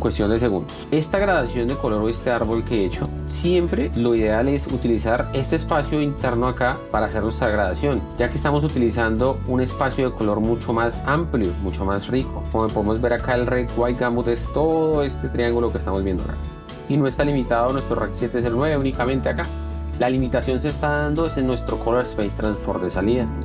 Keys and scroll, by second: 0.2 Escape, 0.8 F1, 19.6 F1.